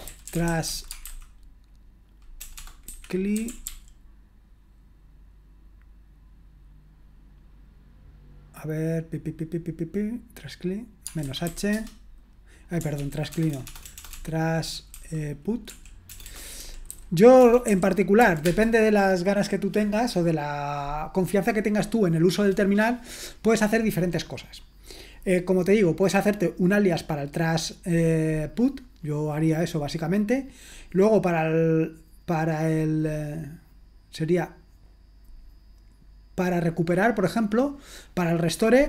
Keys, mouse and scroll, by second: 0.0-4.1 typing, 11.0-11.9 typing, 13.0 ctrl+p, 13.0-18.2 typing, 18.4 Tab.